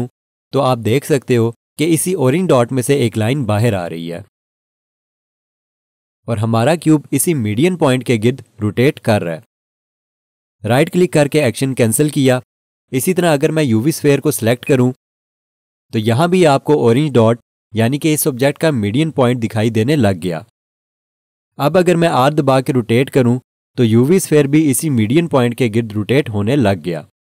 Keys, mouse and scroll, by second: 0.1 r, 11.4 right click, 14.6 click, 22.3 r.